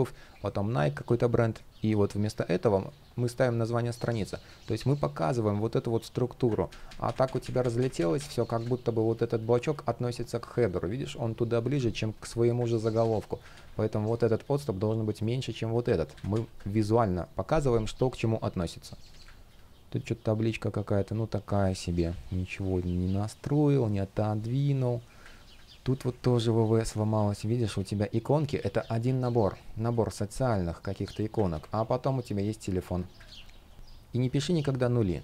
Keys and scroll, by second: 6.4 super+z, 12.5 super+z, 13.2 super+z, 15.8 super+z, 25.8 shift+p, 28.7 super+z, 31.2 super+z, 32.9 super+z.